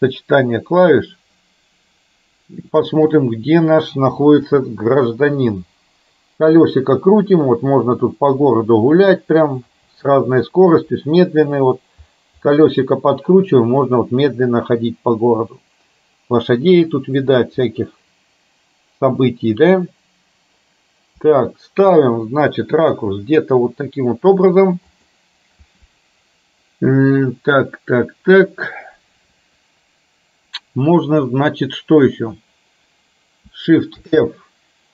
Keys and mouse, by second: 34.1 shift+f.